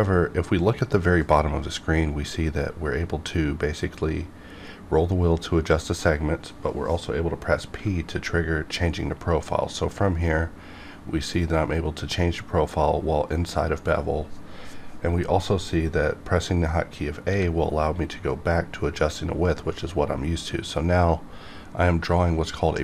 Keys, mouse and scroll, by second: 3.0-4.8 scroll up 1, 9.8 p, 17.3 a.